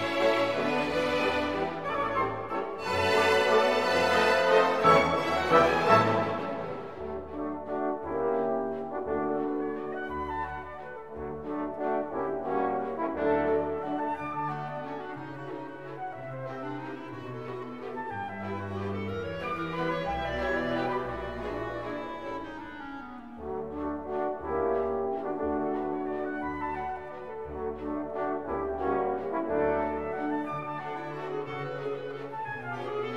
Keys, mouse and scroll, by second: 1.0 3, 4.2-9.2 typing, 10.4 click, 12.6 click, 13.6 click, 14.4 click, 16.5 click, 21.0 click, 22.5 x, 23.0 1, 25.2-27.7 typing, 30.4-31.8 typing, 32.6 click.